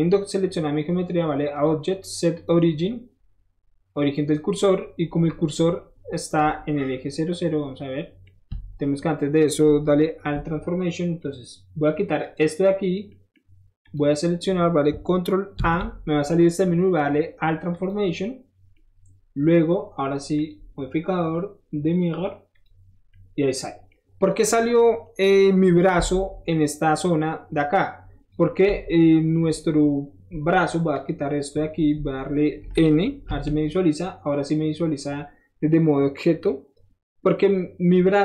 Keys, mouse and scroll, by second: 1.5 click, 2.3 click, 4.0 click, 4.7-5.1 scroll up 2, 5.4 scroll down 1, 5.9 scroll down 1, 6.8-8.2 middle drag, 12.2 ctrl+click, 13.1 middle click, 13.8 click, 15.5 ctrl+a, 17.7 click, 20.3 click, 22.5 click, 24.4 middle click, 26.5-28.3 drag, 28.7 7, 30.9 click, 33.4 n.